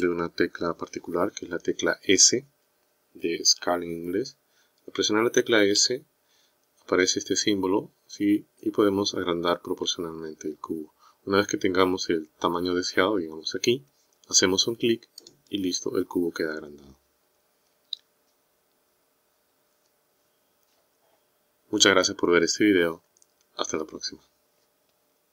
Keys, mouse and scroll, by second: 5.8 s.